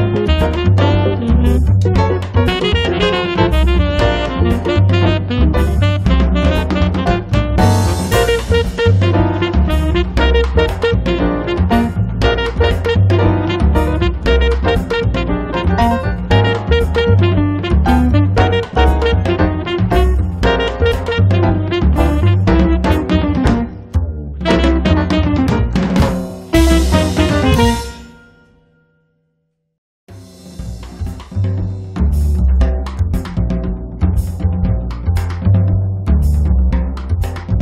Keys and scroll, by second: 1.0 m, 2.2 3, 2.5 Return, 3.0 space, 3.9 m, 5.3 space, 6.5 p, 8.1 4, 8.5 Return, 10.0 2, 10.3 Return, 12.9 space, 18.2 l, 25.4 space, 28.9 l, 31.9 space.